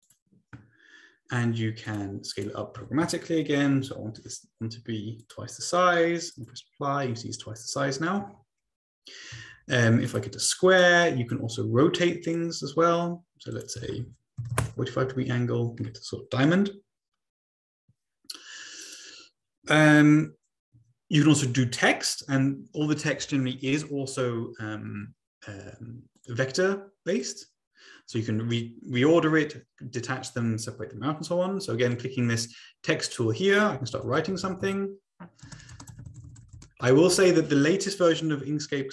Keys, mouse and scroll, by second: 0.0 click, 1.8-3.3 drag, 2.8 ctrl+a, 3.7 ctrl+a, 3.8 typing, 5.2 click, 6.3 click, 7.1 click, 9.5 ctrl+z, 10.1 click, 10.8 click, 12.2 click, 13.4 click, 13.8 ctrl+a, 13.8 ctrl+click, 14.4 typing, 14.6 Return, 18.8 click, 19.6 click, 19.6 Delete, 26.1-27.3 drag, 27.6-29.3 drag, 33.9-37.4 typing.